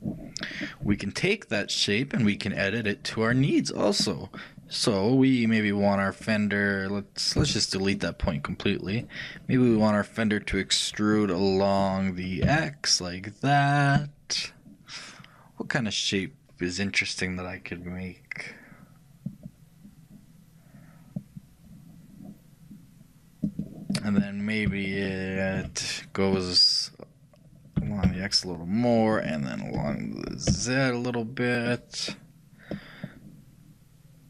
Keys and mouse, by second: 0.9 click, 0.9 n, 1.7-3.3 middle drag, 3.3-8.1 right drag, 3.4 g, 24.9-26.9 shift+middle drag, 27.8 e, 29.9 g.